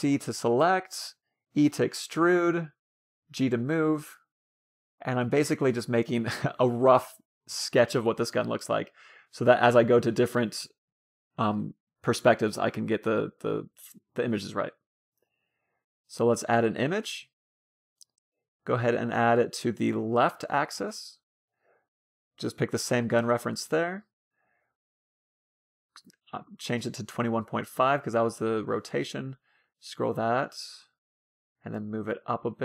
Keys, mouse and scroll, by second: 0.1 a, 0.5 c, 1.7-3.4 right drag, 2.1 e, 3.2 g, 5.2 a, 5.6 b, 6.9-8.5 drag, 13.4 ctrl+KP_3, 15.7-17.4 middle drag, 18.0-21.4 drag, 19.0-20.8 middle drag, 21.9-23.6 drag, 24.7-26.8 middle drag, 26.5-27.9 drag, 29.6-31.0 drag, 32.3-32.6 drag.